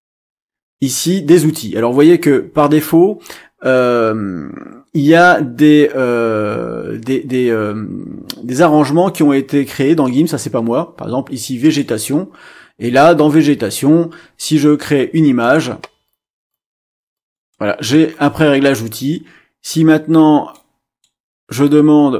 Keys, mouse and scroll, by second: 9.6-9.9 scroll down 2, 11.6 click, 15.4 click, 16.0 click, 16.5 click, 17.1 click, 17.5 click, 20.5 click.